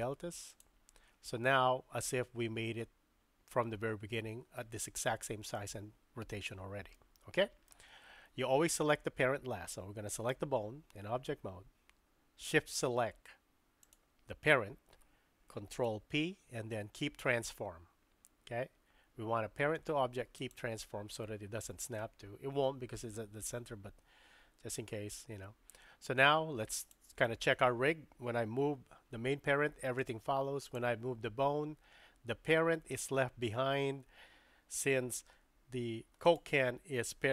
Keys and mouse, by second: 6.9-8.3 middle drag, 10.1 click, 13.8 shift+click, 15.9 ctrl+p, 26.8 click, 28.6 g, 30.8 click, 32.1 g.